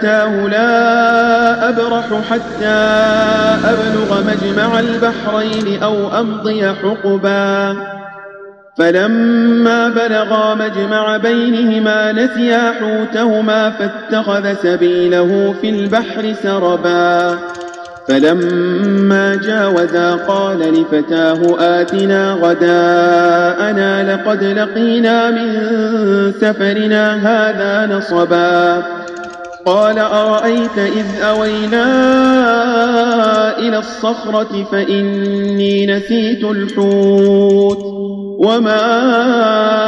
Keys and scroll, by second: 4.7 ctrl+a, 17.1 space, 18.2 space, 20.6 space, 21.8 space, 29.6 space, 31.3 space, 33.1 space, 36.6 space.